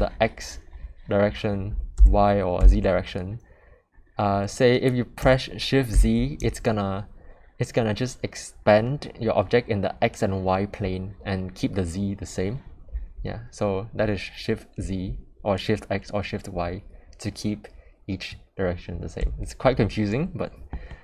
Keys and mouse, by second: 20.9-21.0 middle drag.